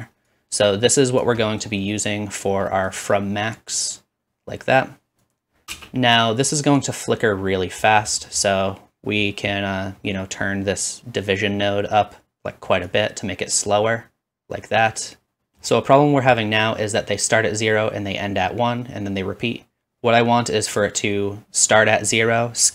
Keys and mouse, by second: 5.7 space.